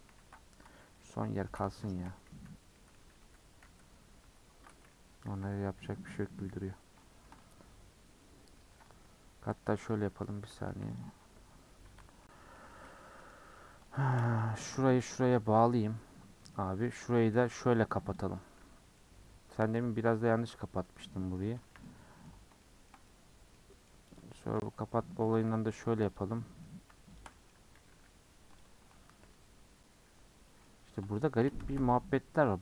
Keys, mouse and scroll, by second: 0.1 ctrl+z, 0.6 Tab, 0.9-2.1 middle drag, 2.1 ctrl+z, 2.3 ctrl+z, 2.7 ctrl+z, 3.0 ctrl+z, 3.2 ctrl+z, 3.6 ctrl+z, 4.2 ctrl+z, 5.3 /, 5.7 /, 6.1 /, 6.4-7.0 scroll up 9, 7.0 shift+middle click, 7.5-8.2 scroll up 11, 8.2 middle click, 8.7-9.3 scroll up 4, 9.3-9.9 scroll down 1, 9.9 alt+click, 10.7 1, 11.0 click, 11.9 KP_Decimal, 12.2 middle click, 12.8-13.5 scroll down 4, 13.2 middle click, 13.5-14.6 middle drag, 14.6 shift+click, 15.0 j, 15.3-16.4 scroll down 10, 15.3 middle click, 16.4 middle click, 16.5-16.9 scroll up 2, 16.9 middle click, 17.2 2, 17.5 alt+click, 18.1 alt+click, 18.6 f, 19.0 middle click, 19.8-20.8 scroll down 3, 20.1 middle click, 20.8 middle click, 21.7 1, 21.8 middle click, 22.3-22.6 scroll down 1, 22.6-24.2 shift+middle drag, 24.2 click, 24.3-25.3 shift+middle drag, 25.3 shift+click, 25.7 j, 26.1 click, 26.3 middle click, 27.2 shift+click, 27.3 middle click, 27.9 j, 28.6 click, 29.2 g, 30.6-31.6 shift+middle drag, 31.6 shift+Tab.